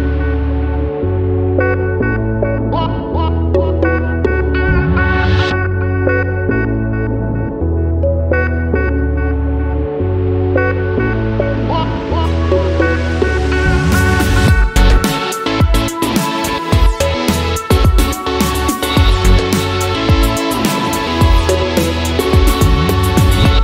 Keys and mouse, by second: 11.2 shift+middle click, 18.9 click, 19.2 Page_Down, 20.3 r, 21.6 g, 22.8 g.